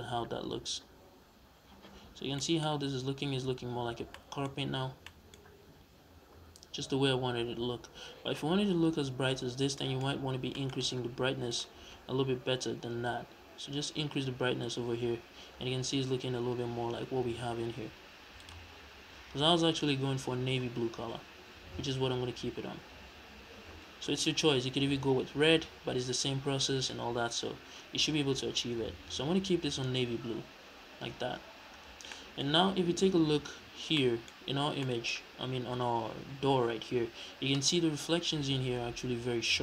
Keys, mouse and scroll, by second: 0.5-2.3 scroll up 1, 3.3 a, 6.1-7.7 scroll down 2, 7.7-8.2 scroll up 2, 8.2 scroll up 1, 8.3-9.6 scroll down 2, 10.0-11.4 scroll up 3, 11.4 click, 18.3 click, 31.5-32.0 scroll down 2, 32.0-34.6 middle drag, 33.5-33.9 scroll up 2, 34.6-35.2 scroll down 2, 34.7 middle click, 35.6-39.6 middle drag.